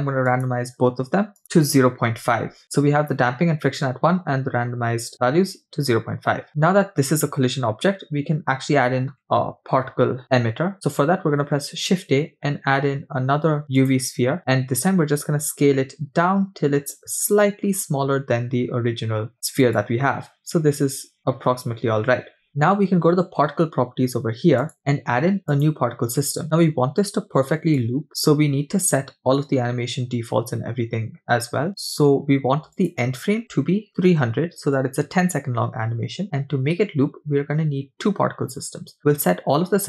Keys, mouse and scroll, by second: 0.3-1.8 shift+drag, 2.6 click, 11.4 shift+a, 15.3 s, 24.6 click, 25.5 click, 27.8 click, 32.8-34.7 drag, 34.0 0, 39.6-39.8 scroll down 3.